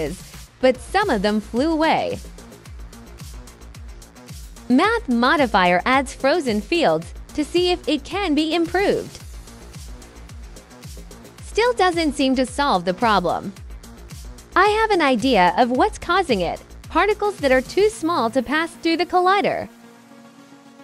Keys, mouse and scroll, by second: 1.1 alt+click, 2.0 alt+click, 2.8 click, 3.6 right click, 5.1 click, 6.3-7.8 drag, 9.1 click, 9.7 click, 10.4 click, 10.7 click, 11.9 right click, 12.1 alt+click, 14.2 alt+click, 15.2 click, 17.2 KP_0, 17.5 click, 18.7 5, 18.9 click, 20.4 click.